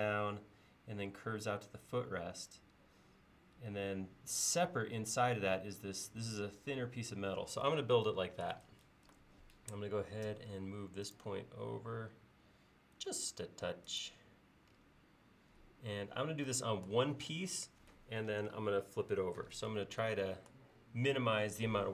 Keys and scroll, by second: 10.3 m.